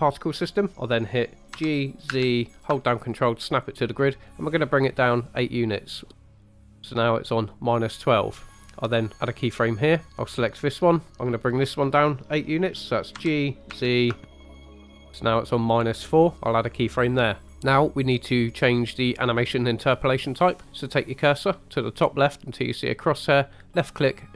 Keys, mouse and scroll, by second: 0.7 Escape, 1.5 g, 2.1 z, 6.8 ctrl+click, 9.3 click, 10.1 click, 13.2 g, 13.7 z, 15.1 ctrl+click, 17.4 click, 23.6 click.